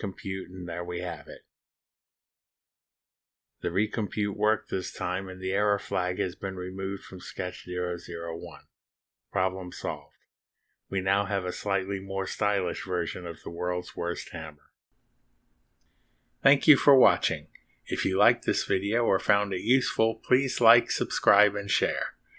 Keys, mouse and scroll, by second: 5.2 click, 5.6 click, 6.6 ctrl+r, 13.8-15.6 drag.